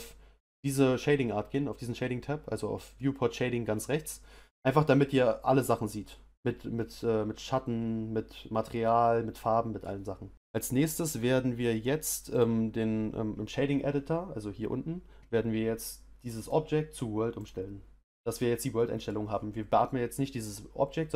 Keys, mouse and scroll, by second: 7.8-18.7 middle drag.